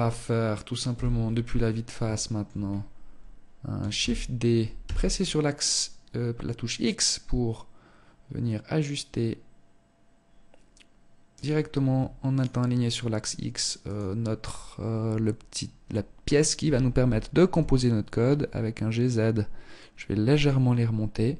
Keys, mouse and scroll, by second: 0.7-1.1 scroll up 3, 1.2 shift+middle click, 1.7-2.3 scroll up 1, 2.3-2.8 scroll down 1, 3.0 shift+d, 11.5 shift+right click, 12.9 shift+right click, 15.6 g, 20.6 right click.